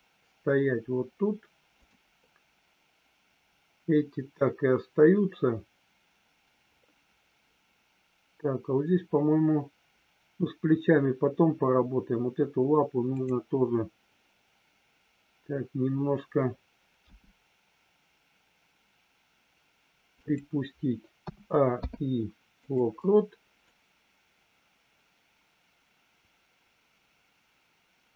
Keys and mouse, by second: 17.0 g, 20.1 click, 21.7 i, 23.6-28.1 drag.